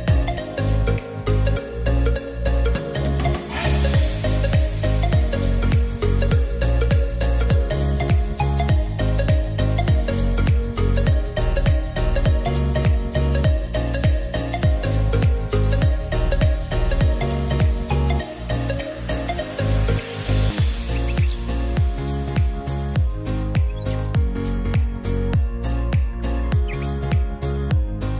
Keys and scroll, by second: 16.6 0, 25.2 5, 25.4 Return, 26.7-27.6 typing.